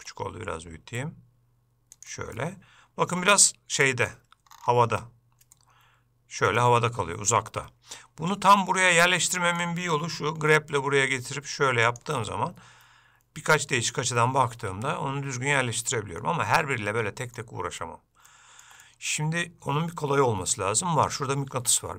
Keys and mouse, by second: 2.5-4.3 middle drag, 5.8 ctrl+middle click, 9.4 middle click, 12.5-15.8 middle drag, 16.7 middle click, 18.5 shift+middle click, 19.1 middle click.